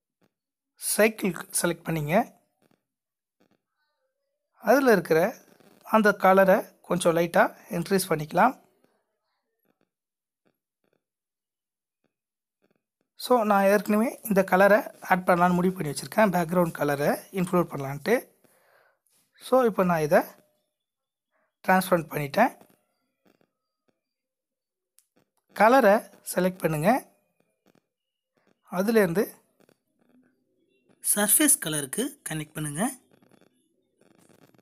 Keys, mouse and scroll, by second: 1.7 click, 5.9 click, 10.1 click.